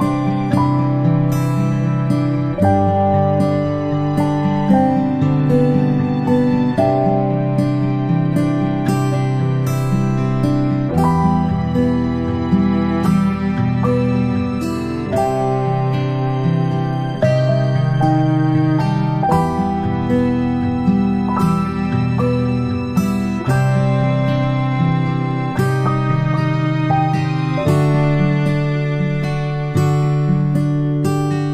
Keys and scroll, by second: 4.1 ctrl+z, 5.1 space, 5.3 space, 8.2 space, 9.2 space, 12.6 space, 14.3 space, 16.1-16.9 space, 24.8-26.4 space, 27.2 space.